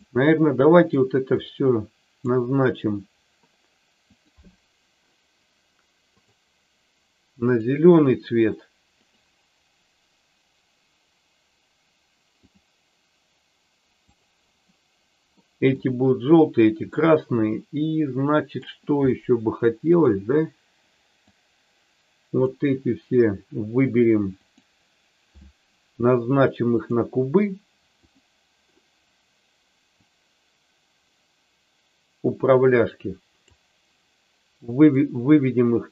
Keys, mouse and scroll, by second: 1.4 click, 4.3 click, 6.0 click, 8.9-12.5 drag, 14.1 click, 15.4 middle click, 16.9-18.5 middle drag, 19.1 middle click, 21.3-22.5 drag, 24.4-26.9 drag, 27.9 click, 29.9-33.4 drag, 35.0-35.9 drag.